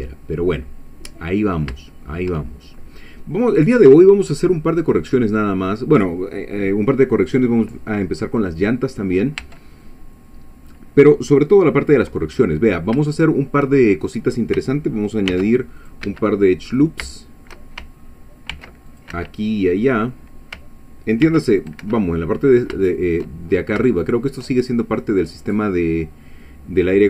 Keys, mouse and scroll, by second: 1.9 shift+middle click, 2.4 shift+middle click, 3.4 click, 4.1 scroll down 1, 4.6-6.2 middle drag, 6.9 scroll down 1, 7.4 scroll up 1, 9.5 Tab, 9.8-10.9 middle drag, 12.4 middle click, 15.3 ctrl+r, 15.8 ctrl+click, 16.1 ctrl+Escape, 17.1 shift+middle click, 18.5 ctrl+r, 18.9 ctrl+click, 19.1 ctrl+Escape, 19.8 middle click, 21.2 ctrl+r, 21.6 ctrl+click, 21.8 ctrl+Escape, 22.2 ctrl+middle click, 23.5 shift+scroll up 2, 23.8 shift+middle click.